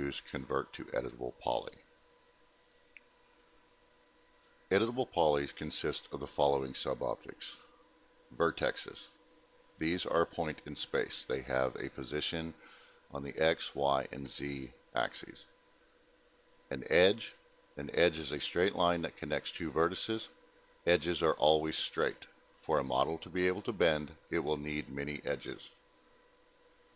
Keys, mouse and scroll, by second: 4.6 click, 5.9 click, 7.7 click, 9.0 click, 10.3 click, 10.7 middle click, 10.7-11.6 scroll, 10.8 middle click, 11.6 middle click, 14.6 click, 15.9 click, 16.8 click, 18.3 click, 19.3 click, 19.4 click, 20.2 click, 25.8 click.